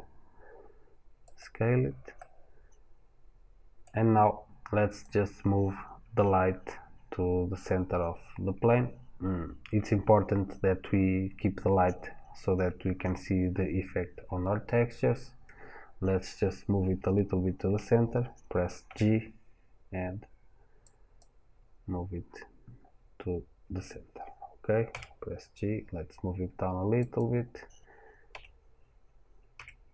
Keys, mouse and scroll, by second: 1.2 click, 2.0-4.7 middle drag, 4.7 click, 18.7 g, 22.5-23.1 scroll down 1, 23.1-24.0 scroll up 1, 24.7 g, 26.9 click, 28.1 KP_7, 29.3 g.